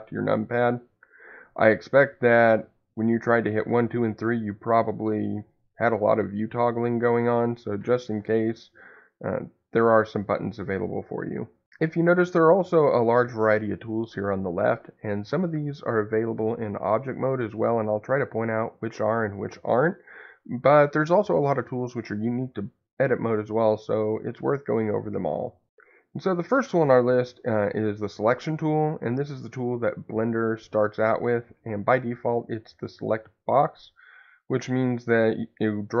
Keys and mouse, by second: 34.7-36.0 drag.